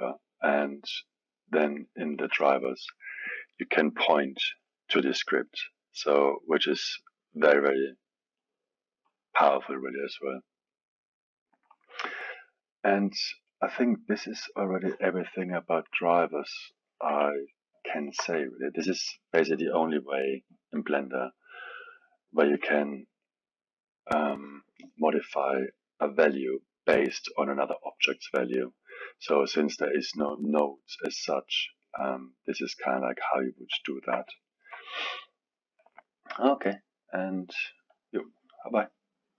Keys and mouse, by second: 2.1-5.1 drag, 9.0-12.0 drag, 15.7-17.1 middle drag, 17.1 KP_1, 17.8-21.6 alt+middle drag, 32.9 click, 33.8-37.6 alt+middle drag.